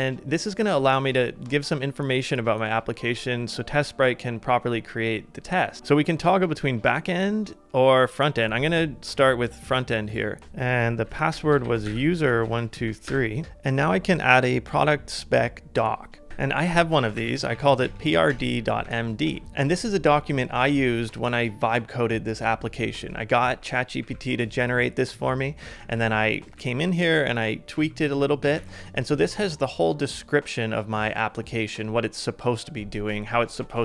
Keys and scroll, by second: 10.4 super+c, 10.4 super+Tab, 10.4 super+v, 16.3 ctrl+a, 16.3-18.3 typing, 18.9 ctrl+a, 19.2 ctrl+a, 19.5 ctrl+c, 23.5 ctrl+d, 24.0 ctrl+d, 25.6 typing, 26.5 ctrl+d, 27.2 ctrl+d, 27.7 ctrl+d, 28.4 g, 28.5 g.